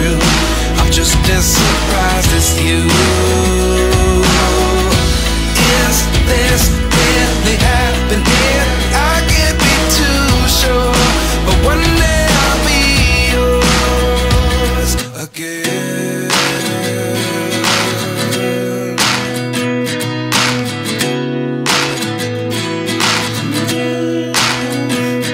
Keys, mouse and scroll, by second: 7.5 scroll down 1, 17.3 typing, 18.2 double click, 20.1 ctrl+t.